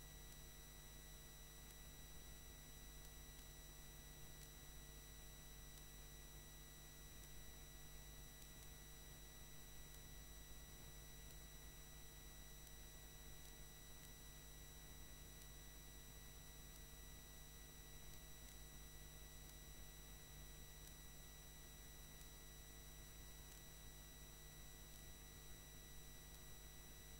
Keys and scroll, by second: 0.1 ctrl+2, 0.3 ctrl+0, 1.0 ctrl+Return, 5.2 ctrl+2, 5.5 ctrl+0, 6.1 ctrl+Return, 16.4 ctrl+2, 16.5 ctrl+0, 16.9 ctrl+Return, 22.0 ctrl+2, 22.2 ctrl+0, 23.4 ctrl+Return.